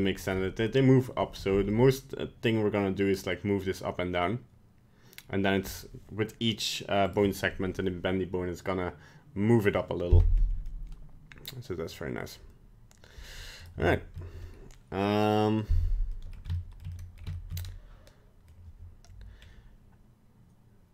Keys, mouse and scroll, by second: 1.5 g, 10.7 middle click, 13.6 right click, 13.9 shift+middle click, 16.2 middle click, 16.9 middle click, 17.3 shift+middle click, 17.6 middle click, 19.4 scroll up 1.